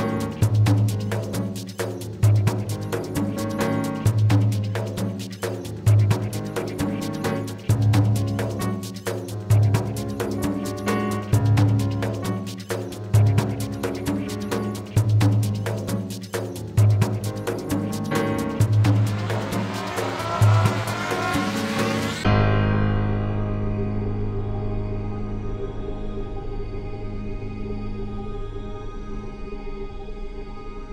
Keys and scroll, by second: 14.3 BackSpace, 15.8 ctrl+z, 18.8 BackSpace, 20.8 BackSpace, 24.6 ctrl+z.